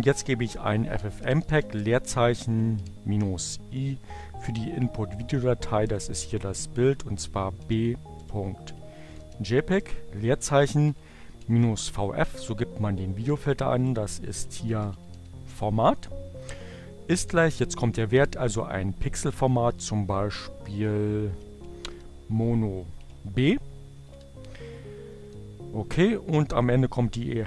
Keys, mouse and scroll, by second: 0.0-2.2 typing, 4.8 space, 7.1-11.3 typing, 12.5 space, 12.7 shift+2, 13.8-15.7 typing, 16.9 shift+0, 17.9 m, 19.9-20.8 typing, 22.4-23.4 typing, 25.3 space.